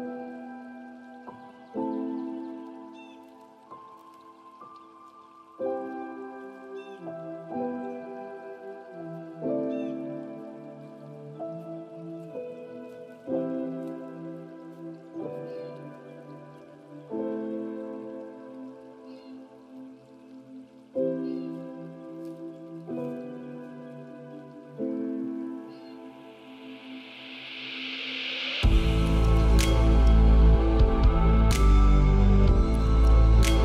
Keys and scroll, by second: 11.5 ctrl+a, 19.6 ctrl+a.